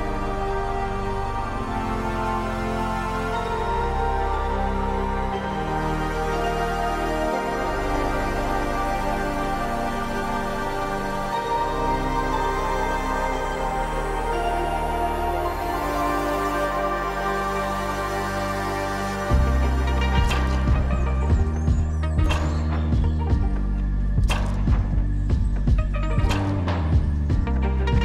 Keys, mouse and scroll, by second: 1.0 click, 1.8-2.6 scroll down 6, 2.3 click, 3.1 a, 3.5 g, 4.2 click, 4.4 shift+a, 7.9 scroll up 6, 8.6 click, 8.6-9.3 scroll up 2, 11.3 click, 12.6 click, 15.4 click, 19.0-19.4 scroll down 2, 20.7 click, 20.7-21.7 scroll down 12, 21.7 click, 22.7-23.8 scroll down 1, 23.8 click, 23.8-24.3 scroll down 7.